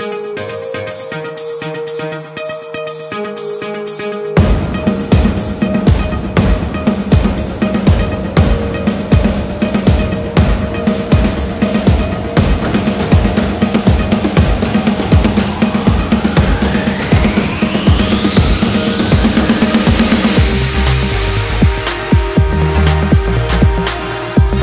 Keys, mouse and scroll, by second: 0.1 scroll up 2, 0.3 shift+click, 0.4 middle click, 0.5-6.4 typing, 0.7 middle click, 0.8 scroll up 1, 1.0 shift+click, 1.2 middle click, 1.7 middle click, 1.9 click, 2.0 shift+click, 2.2 middle click, 2.6 middle click, 2.9 click, 3.0 shift+click, 3.1 middle click, 3.5 middle click, 3.9 shift+click, 4.4 shift+middle click, 4.7 click, 4.8 middle click, 5.3 click, 5.4 middle click, 6.0 shift+click, 6.3 shift+middle click, 7.1 click, 7.7 click, 7.8-16.4 typing, 8.6 click, 9.1 click, 9.3 click, 9.5 shift+middle click, 9.9 click, 10.0 click, 10.8 shift+middle click, 11.0 scroll up 1, 11.2 click, 11.4 middle click, 11.5 click, 11.6 middle click, 12.0 click, 12.2 shift+click, 12.4 middle click, 12.7 middle click, 12.9 shift+click, 13.2 middle click, 13.6 shift+middle click, 13.9 click, 14.5 click, 15.0 click, 16.0 shift+middle click, 16.5 shift+middle click, 17.1 shift+click, 17.3 shift+click, 17.4 middle click, 17.8-24.1 typing, 18.0 middle click, 19.2 middle click, 19.7 middle click, 20.0 shift+click, 20.4 middle drag, 20.6 shift+click, 21.1 middle click, 21.6 click, 22.0-22.4 middle drag, 22.5 click, 22.5 middle click, 23.5 shift+middle click, 23.8-24.1 scroll down 3, 23.8 shift+middle click, 24.3 scroll up 3, 24.3 shift+middle click.